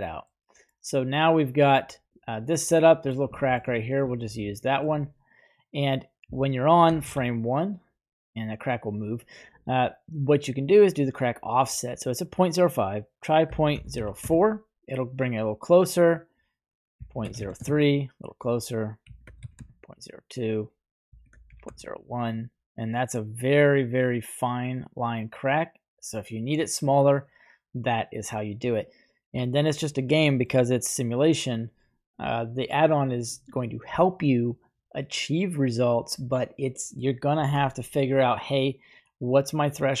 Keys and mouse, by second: 1.6 click, 2.1 click, 2.7-3.1 middle drag, 3.3 shift+middle drag, 4.1-4.9 shift+middle drag, 7.2 shift+Left, 11.3-14.4 drag, 16.2-17.8 drag, 18.5-19.8 drag, 20.7-21.9 drag, 23.9-29.4 drag, 30.2 middle drag, 30.7 right click, 31.5 right click, 33.3 right click, 38.3-40.0 drag.